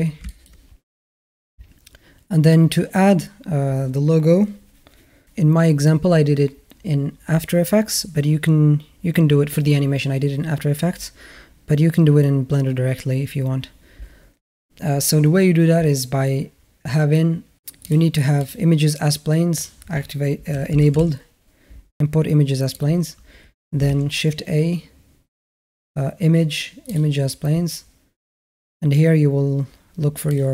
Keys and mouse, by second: 0.1 shift+middle drag, 17.7-18.4 drag, 23.7 shift+a.